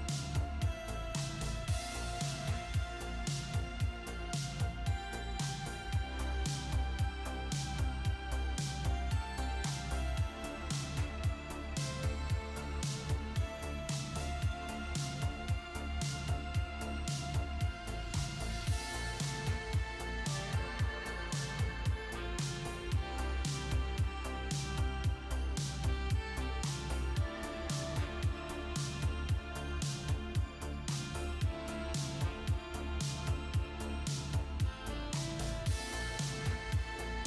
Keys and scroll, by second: 13.2 super+a, 13.6-15.9 typing, 16.1 Return, 27.0 super+Caps_Lock, 27.1 super+c, 28.4 super+Caps_Lock, 28.5 super+v, 34.1 shift+Caps_Lock, 35.2 Left, 35.7 shift+Right.